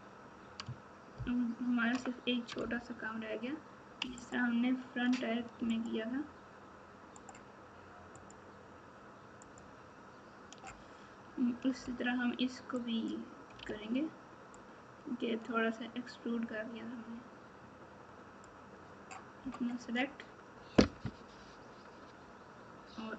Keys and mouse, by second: 2.5 Tab, 13.6 alt+z, 14.8-18.0 drag.